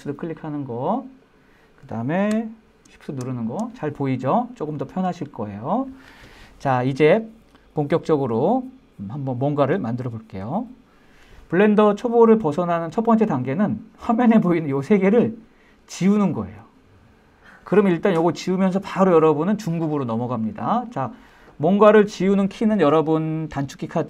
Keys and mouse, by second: 1.1 click, 2.3-2.8 middle drag, 15.8-17.7 drag.